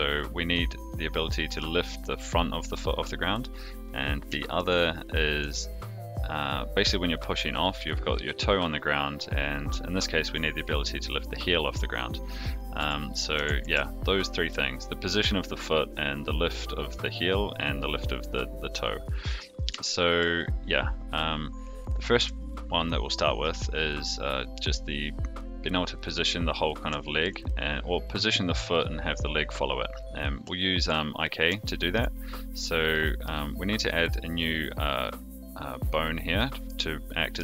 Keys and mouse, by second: 4.4 shift+middle drag, 5.1 click, 5.4 r, 12.7 a, 13.6 alt+r, 19.8-20.2 shift+middle drag, 22.1 Tab, 27.0 shift+middle click, 31.6 shift+middle click, 32.9 middle click, 35.1 click, 36.3 middle click, 37.3 KP_3.